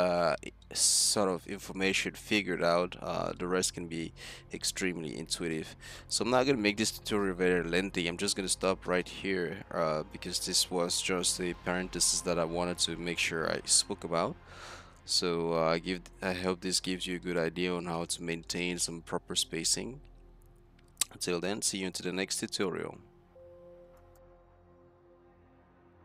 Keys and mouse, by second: 4.7 middle click, 5.8 middle click, 15.9 middle click, 16.7-17.8 drag, 18.0 middle click, 18.6-19.1 middle drag.